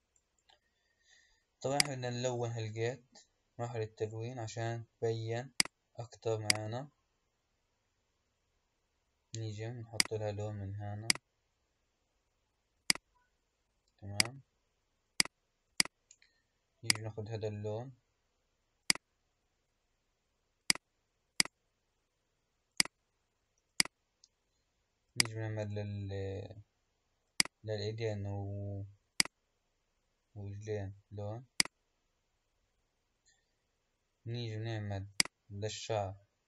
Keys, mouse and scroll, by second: 1.7 click, 3.7-5.5 scroll up 5, 5.5 drag, 6.4-9.4 drag, 9.9 click, 16.9 drag, 18.8-21.3 drag, 21.4 click, 25.0 click, 27.2-29.2 drag, 35.0 click.